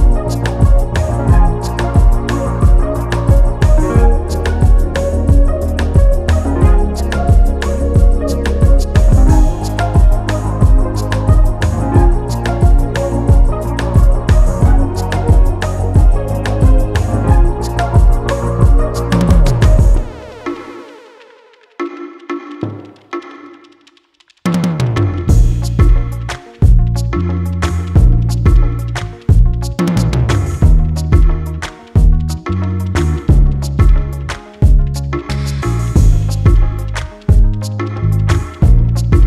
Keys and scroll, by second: 3.3 ctrl+j, 24.1 ctrl+s, 24.9 ctrl+alt+s, 25.7 ctrl+alt+s.